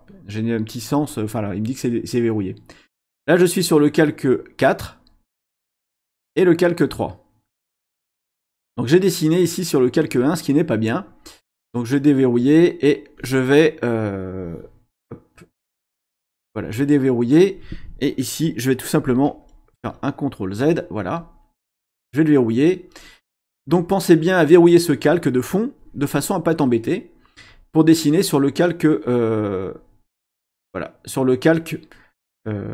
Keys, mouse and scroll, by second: 3.0 click, 4.2 click, 5.0 click, 6.1 click, 6.8 click, 7.5 click, 8.1 click, 10.2 click, 10.6 click, 11.8 click, 16.1 click, 19.2 ctrl+z, 22.5 click, 25.0 click, 27.5 click, 30.6 click.